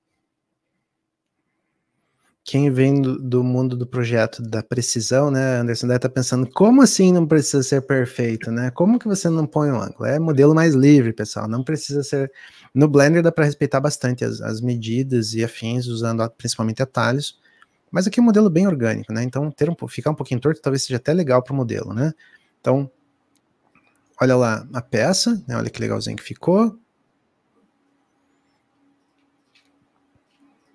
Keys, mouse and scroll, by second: 3.8 shift+d, 7.4 click, 16.1 click, 21.0-30.7 middle drag.